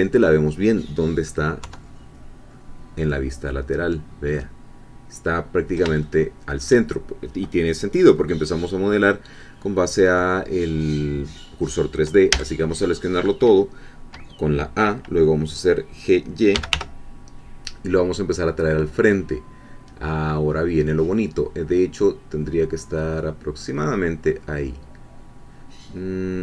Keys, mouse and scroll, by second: 1.6 3, 6.0-7.2 shift+middle drag, 12.3 a, 16.3-17.2 typing.